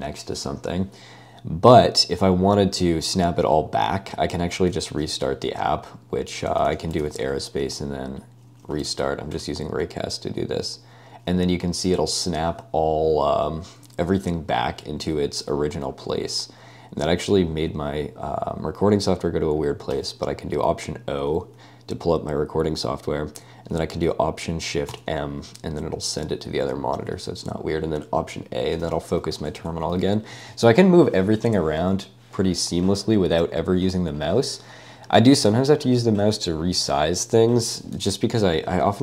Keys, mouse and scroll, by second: 4.6 super+space, 6.3-7.3 typing, 8.4-9.8 typing, 19.9 ø, 24.9 â, 27.2 å, 29.0-30.1 typing, 38.4 ctrl+d, 38.9-39.0 typing.